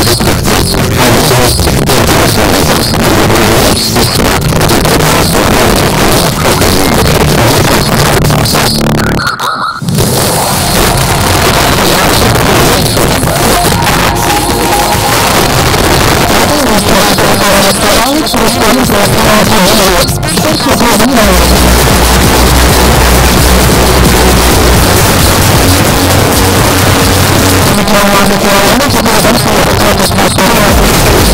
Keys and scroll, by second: 27.4 Page_Down.